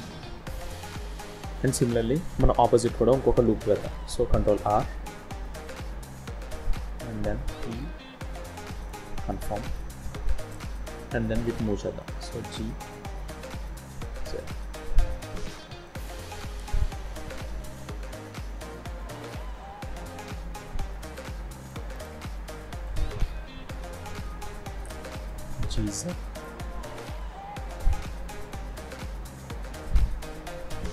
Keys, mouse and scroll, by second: 1.4-2.1 scroll down 1, 2.4-3.6 scroll down 1, 4.2 ctrl+r, 10.5 scroll up 2, 10.9 shift+middle click, 11.9 click, 13.1 g, 15.0 g, 16.5 scroll down 3, 17.2 click, 18.7 g, 21.6 shift+middle click, 21.9 shift+scroll down 1, 22.1-22.7 scroll up 4, 22.7 click, 23.2 z, 24.6 click, 25.3 g, 26.8 click, 27.6 g, 29.1 click, 30.1 g.